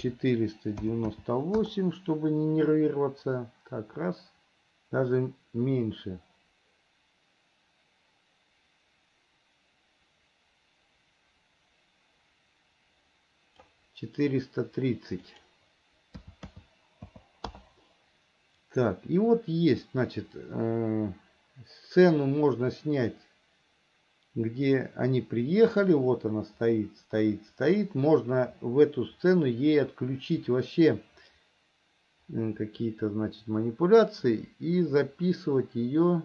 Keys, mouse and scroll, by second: 3.1-14.1 drag, 15.4-17.8 drag, 19.0-36.2 drag.